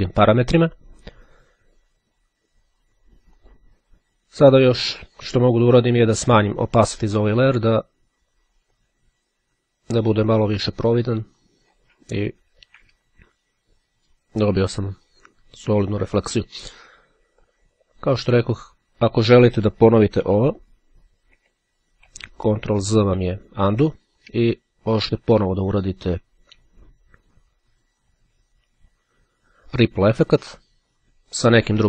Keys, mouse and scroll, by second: 3.5 click, 4.9-12.4 drag, 20.7 ctrl+z, 23.2 z, 25.6-26.6 drag, 28.0 click.